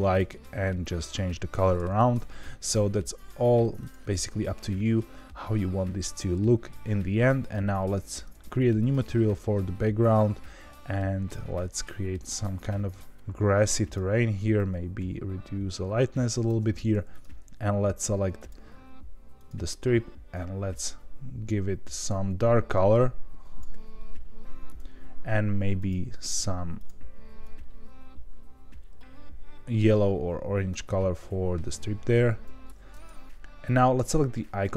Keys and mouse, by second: 0.1 drag, 1.9 ctrl+z, 7.4 click, 18.6-23.7 drag, 26.8 drag.